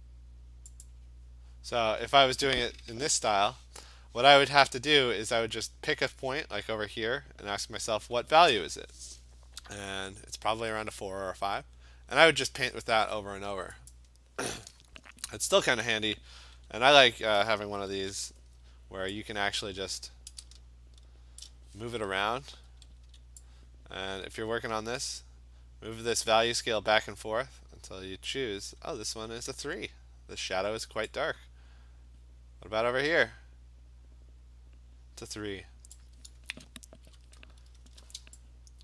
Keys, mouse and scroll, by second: 0.9 click, 3.2 b, 13.9 click, 16.6 v, 17.9 ctrl+t, 21.4 shift+click, 22.4 Return, 23.1 v, 28.7-33.8 drag, 36.0 click, 37.1 b.